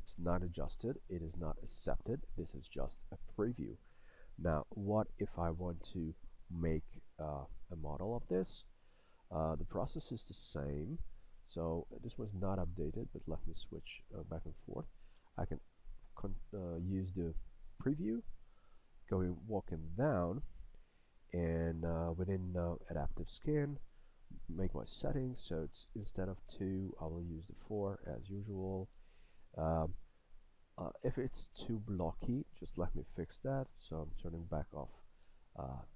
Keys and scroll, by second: 4.7 a, 15.3 a, 35.3 a.